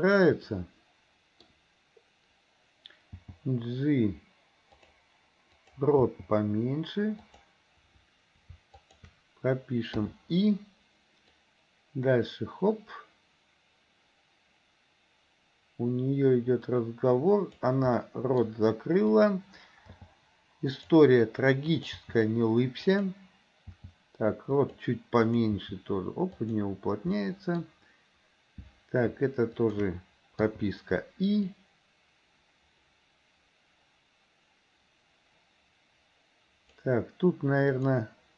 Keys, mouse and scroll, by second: 0.5 middle click, 3.2 g, 5.6 click, 6.0 g, 8.8 shift+click, 11.5-17.7 drag, 18.1 middle click, 19.1 click, 19.9 g, 22.2 g, 23.8 g, 25.3 click, 25.7 g, 27.2 scroll up 1, 27.3 middle click, 27.6-28.7 scroll down 1, 29.6 shift+click, 31.6-37.6 drag, 37.8 click.